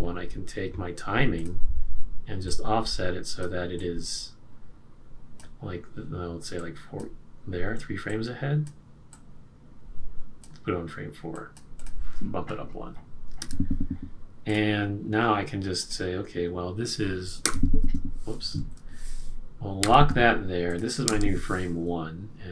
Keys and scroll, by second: 13.4 F5, 17.4 F5, 18.5 F5, 18.6 super+z, 19.8 F6.